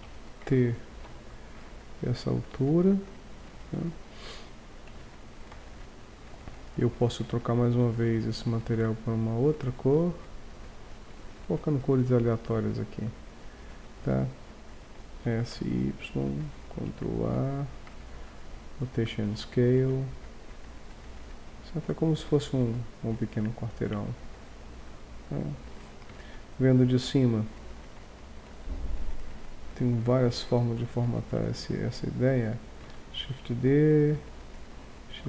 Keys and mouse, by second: 0.0 a, 1.0 b, 3.7 Tab, 4.9 Tab, 5.3 Tab, 5.5 z, 15.2 s, 16.5 click, 16.8 ctrl+a, 18.1-18.4 drag, 18.7-19.1 drag, 19.9 click, 20.1 click, 20.6 click, 23.4-23.7 drag, 23.7-25.5 middle drag, 26.1 KP_7, 28.1 middle click, 29.1 click, 29.2 right click, 29.3 middle click, 29.4 click, 29.4 right click, 29.6 middle click, 29.7 click, 29.7 right click, 30.2 g, 31.4-33.2 drag, 32.8 shift+d, 34.5 right click, 35.1 shift+d.